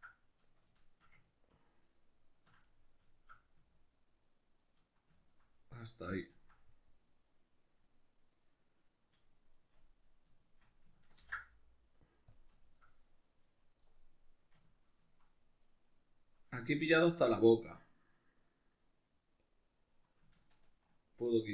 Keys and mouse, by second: 1.3 ctrl+right click, 2.4 ctrl+right click, 2.7-4.6 middle drag, 4.6 ctrl+right click, 5.2 ctrl+right click, 5.6-9.4 middle drag, 9.4 shift+right click, 9.6 shift+right click, 9.8-16.5 middle drag, 11.2 ctrl+e, 16.5 right click, 16.9-21.5 middle drag.